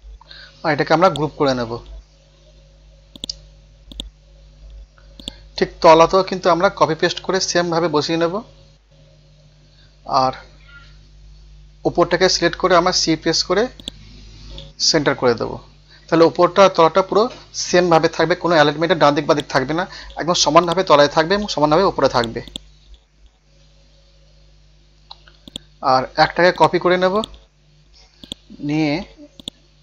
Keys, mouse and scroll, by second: 1.1 click, 1.5 scroll down 1, 2.2-3.1 scroll up 1, 3.1 click, 3.9 right click, 4.3 scroll up 1, 5.2 click, 6.5 scroll up 1, 8.4 scroll down 1, 9.6 scroll up 1, 10.5 scroll down 1, 11.4 scroll up 1, 13.8 shift+click, 14.4 scroll down 1, 15.2 scroll up 1, 18.3 scroll down 1, 19.3 click, 23.2-24.3 scroll up 1, 24.6 ctrl+u, 25.5 click, 25.9-26.5 scroll up 1, 26.5 click, 27.2 right click, 27.5 scroll up 1, 28.2 click, 29.0 ctrl+z, 29.4-29.8 drag.